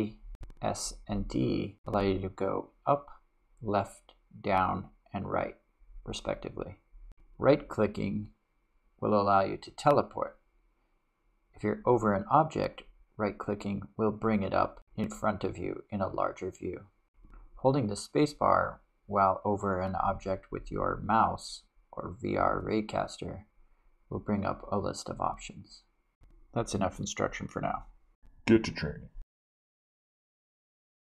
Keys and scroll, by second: 0.5 s, 1.3 d, 2.4 w, 3.3 a, 4.5 s, 5.3 d, 19.0 space.